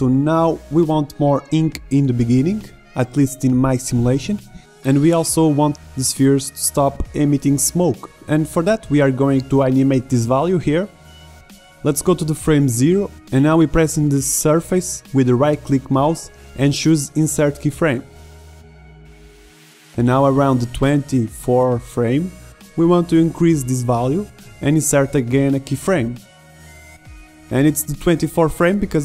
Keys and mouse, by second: 2.9 alt+a, 3.3-4.6 right drag, 4.6-6.0 drag, 8.7-9.9 drag, 10.2-11.5 drag, 13.7-14.9 drag, 15.1 middle click, 17.7 middle click, 21.6 click, 28.4-29.0 drag.